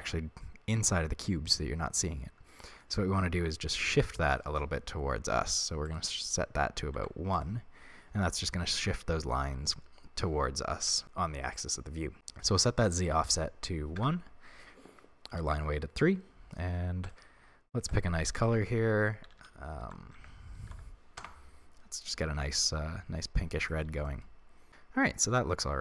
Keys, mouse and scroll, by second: 5.8-7.4 drag, 12.8-17.0 drag, 14.0 Return, 19.4 f, 22.5-25.8 middle drag, 23.4 scroll down 2, 24.4 scroll down 2.